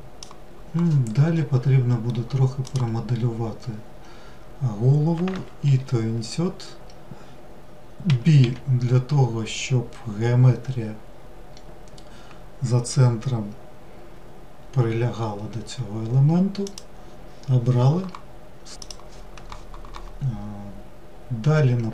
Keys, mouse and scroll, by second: 1.5 click, 21.1 alt+middle drag.